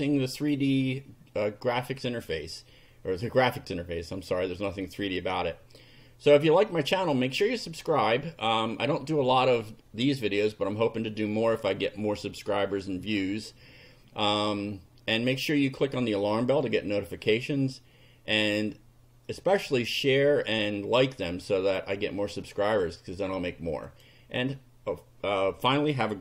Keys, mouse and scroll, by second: 6.7 click, 9.3 click, 22.4 click, 23.8 click.